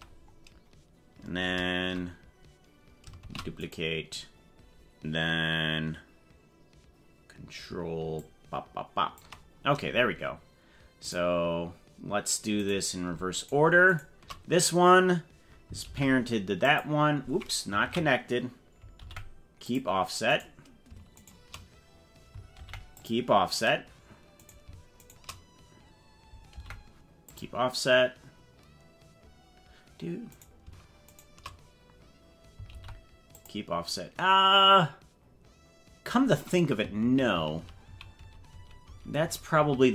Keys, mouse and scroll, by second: 0.5 scroll down 2, 3.3 shift+d, 8.3-9.3 ctrl+drag, 11.2 right click, 12.0 scroll down 1, 12.6 right click, 13.3 shift+right click, 15.8 ctrl+p, 17.8 ctrl+z, 19.0 ctrl+p, 20.4 right click, 21.2 shift+right click, 22.5 ctrl+p, 24.4 right click, 25.0 shift+right click, 26.6 ctrl+p, 30.4 right click, 31.1 shift+right click, 32.8 ctrl+p, 37.0 ctrl+z, 37.4 ctrl+z, 37.6 ctrl+z, 37.8 ctrl+z, 38.2 ctrl+z, 38.6 ctrl+z, 38.8 ctrl+z, 39.2 ctrl+z, 39.6 ctrl+z.